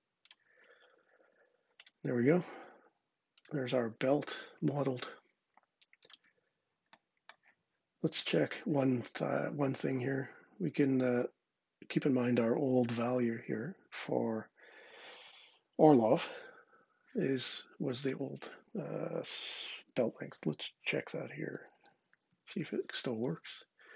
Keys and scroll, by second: 21.1-22.8 typing, 22.9 Return.